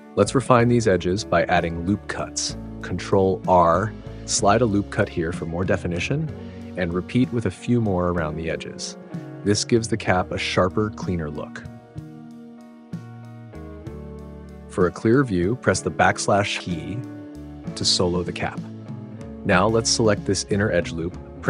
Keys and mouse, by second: 0.9 ctrl+r, 1.4 click, 2.9 click, 5.2 ctrl+r, 5.5 click, 8.0 click, 9.7 ctrl+r, 9.9-11.5 drag, 12.5 click, 15.8 /, 18.6 alt+click, 20.9 e.